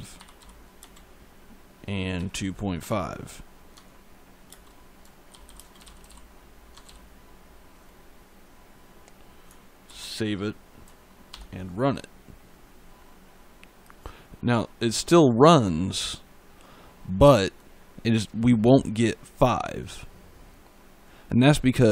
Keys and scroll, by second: 0.0 5, 0.6 space, 2.0 2, 2.6 5, 3.6 Tab, 4.3 space, 5.4-6.7 typing, 6.6 Tab, 9.7 ctrl+s, 11.2 ctrl+F5.